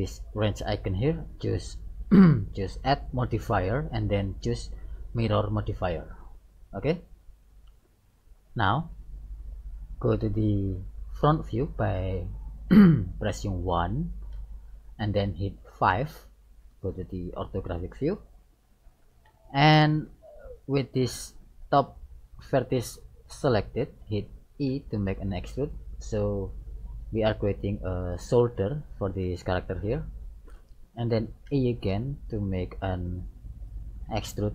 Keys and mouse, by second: 0.5-2.3 drag, 2.9-4.8 drag, 9.5-11.5 middle drag, 14.4 KP_1, 15.8 KP_5, 17.3-21.2 middle drag, 21.1 right click, 24.7 e, 31.5 e.